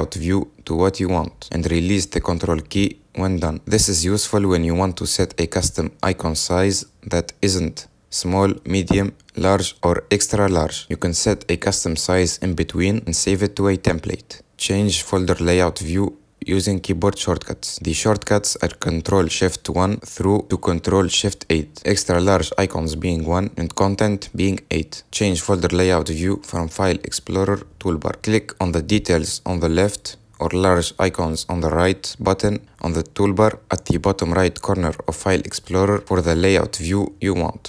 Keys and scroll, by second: 18.2 ctrl+shift+1, 25.1 F10.